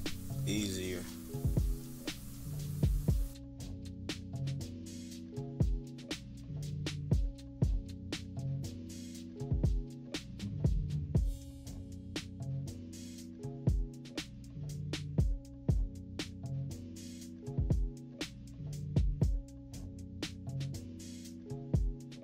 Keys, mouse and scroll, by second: 0.5 click, 4.6 click, 5.2-7.5 typing, 5.4 scroll up 1, 5.9 click, 6.4 click, 6.9 click, 7.1 scroll down 2, 7.3 scroll up 2, 7.7 scroll down 2, 8.2 click, 10.9 -, 11.0 =, 11.7 click, 14.3 -, 14.9 click, 15.3 click, 15.4 -, 15.5 =, 15.7 click, 15.8-16.3 scroll up 3, 15.8 =, 16.0 =, 16.6 click, 17.9 click, 18.6 click, 19.3 click, 22.0 scroll up 1.